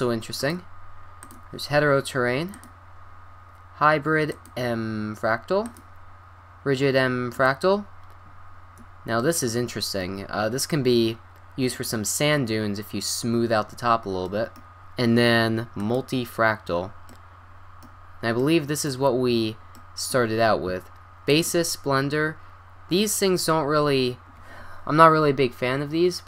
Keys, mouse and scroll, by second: 0.4-2.1 drag, 2.5-4.3 drag, 5.6-7.7 drag, 9.2-12.9 middle drag, 14.8-16.2 drag, 16.2 middle click, 16.6-18.0 middle drag, 18.5 middle drag, 21.3-23.1 drag.